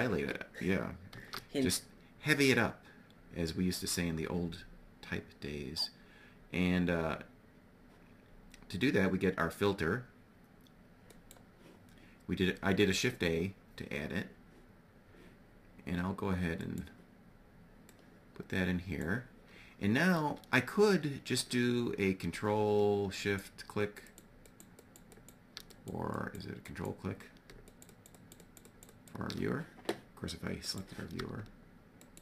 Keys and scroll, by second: 0.6 shift+a.